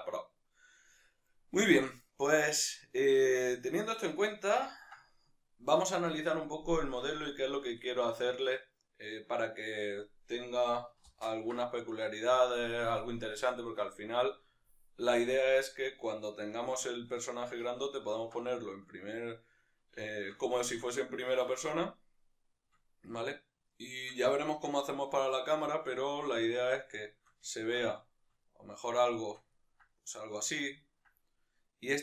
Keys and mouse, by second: 2.3-32.0 middle drag, 11.1 ctrl+space.